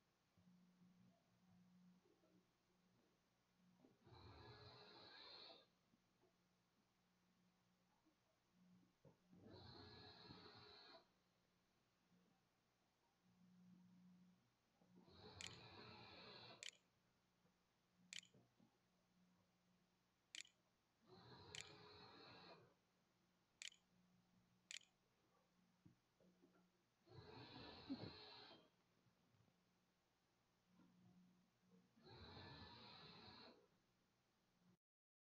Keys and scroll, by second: 13.3-22.9 typing, 24.1 ctrl+a, 24.5 ctrl+s, 24.8-25.6 typing.